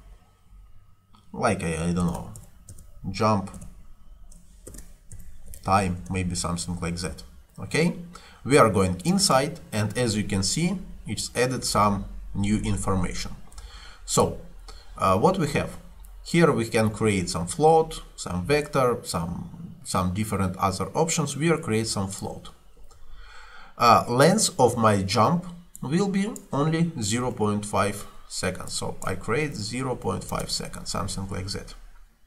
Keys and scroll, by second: 1.8-6.1 typing, 26.9-27.8 typing, 29.6 ., 30.0 5, 30.4 Return.